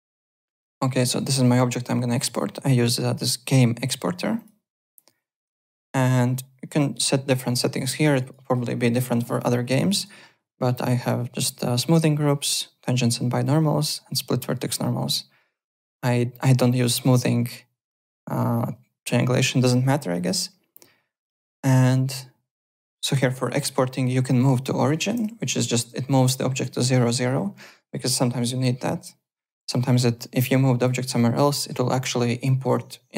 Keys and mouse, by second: 2.0 click, 3.1 click, 4.3 click, 5.6 click, 7.7 click, 9.4 click, 20.1 click, 25.5 alt+middle click, 30.3 click.